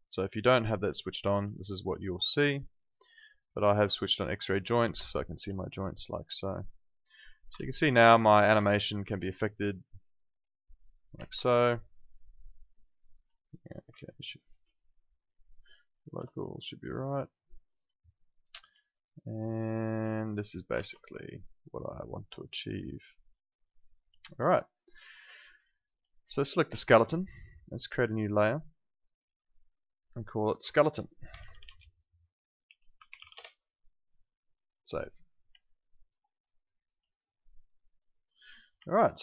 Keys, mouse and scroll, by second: 0.0 click, 1.5 alt+click, 4.9 alt+click, 7.7 z, 7.8 alt+click, 8.1 alt+middle click, 8.2 alt+right click, 9.2 click, 12.0 alt+click, 14.7 ctrl+shift+right click, 16.5 alt+click, 18.8 alt+click, 20.7 ctrl+z, 21.0 alt+click, 22.9 alt+right click, 23.1 alt+middle click, 23.4 alt+right click, 23.7 alt+middle click, 24.2 click, 24.5 alt+click, 25.1 alt+right click, 25.4 alt+middle click, 25.7 alt+click, 26.8 alt+click, 31.1-33.7 typing, 34.7 click, 35.6 alt+click, 36.2 alt+middle click, 36.4 alt+right click, 36.7 alt+click, 37.4 alt+click, 38.9 alt+middle click, 39.1 alt+right click.